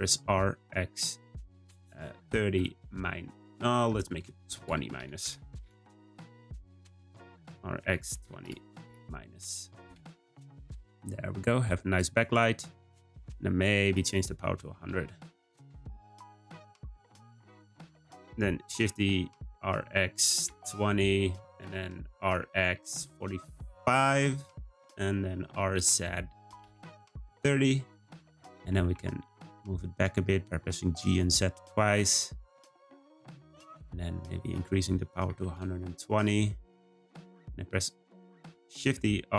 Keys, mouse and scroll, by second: 0.0 r, 7.5 r, 10.9-11.7 scroll down 2, 11.7-13.8 scroll down 1, 13.8-14.8 drag, 14.8 0, 18.2-18.6 scroll down 1, 18.6 shift+d, 22.1 r, 25.4 r, 28.5 g, 34.4-37.4 drag, 38.7 shift+d.